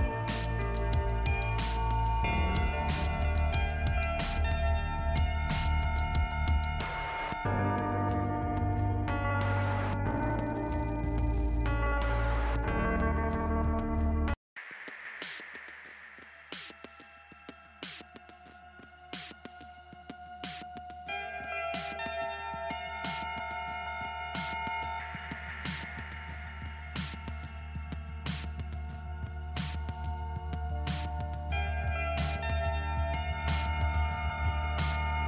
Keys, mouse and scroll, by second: 0.3 scroll down 2, 2.2 middle click, 3.9 click, 6.0 click, 7.2 click, 8.9-9.8 scroll up 2, 9.8 click, 11.4 click, 11.5 click, 12.6 click, 15.1 click, 18.4 click, 19.7 click, 21.2 click, 21.6 k, 21.7 click, 21.8 k, 23.1 scroll up 2, 24.5 click, 26.4 click, 28.9 click, 30.4 click, 32.1 click, 34.2 click.